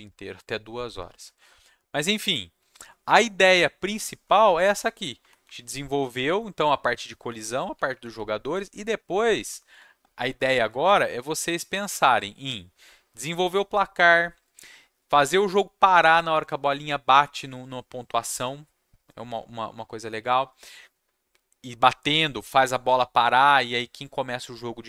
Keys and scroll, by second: 2.5 Down, 3.0 Up, 4.1 Down, 5.2 Down, 5.4 Up, 6.6 Down, 7.3 Up, 7.7-11.8 typing.